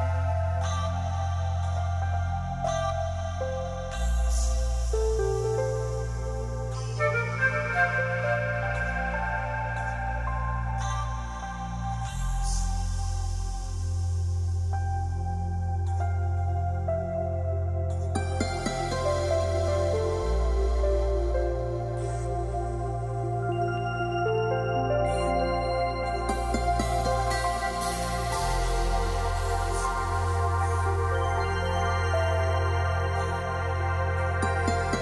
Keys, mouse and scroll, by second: 2.8 click, 3.3 F3, 4.6 x, 6.8 F3, 7.3 middle click, 7.4-8.0 scroll down 4, 8.0 scroll, 8.0 o, 9.2 click, 10.3 click, 11.5 click, 12.5 click, 13.2 click, 13.8 middle click, 13.9 middle click, 14.2 middle click, 15.6-16.2 scroll down 5, 16.9 click, 17.7 m, 19.0 click, 20.2 click, 20.5-21.0 scroll down 3, 21.0 o, 21.6 click, 21.8-22.3 scroll down 2, 22.3-22.9 scroll up 10, 23.7 click, 23.9-24.3 scroll down 4, 24.3-24.9 scroll up 5, 25.4 click, 27.9 click, 28.2 click, 28.7 click, 29.6 right click, 31.2 click, 31.9 click, 32.9 click, 33.1 click, 34.8 click.